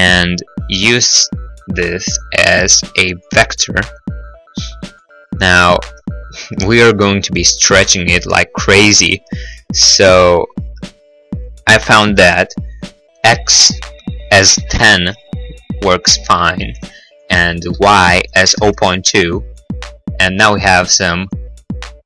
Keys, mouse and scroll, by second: 1.5 click, 2.0 click, 4.7 click, 4.8 click, 5.2 right click, 5.6 right click, 5.7-8.1 scroll, 6.4 middle click, 6.5 middle click, 6.7 middle click, 6.8 middle click, 6.9 middle click, 7.3 middle click, 7.5 middle click, 9.3 click, 14.7 1, 14.7 0, 14.9 Return, 17.5 click, 18.6 0, 18.6 ., 18.6 2, 18.7 Return.